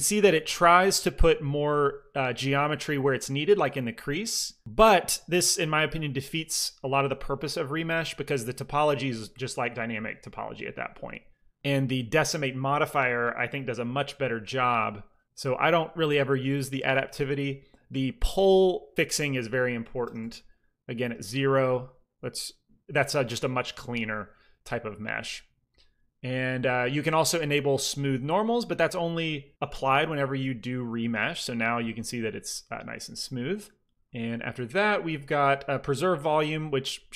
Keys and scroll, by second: 19.9 KP_0, 20.1 Return, 21.5 ctrl+r, 30.4 ctrl+r.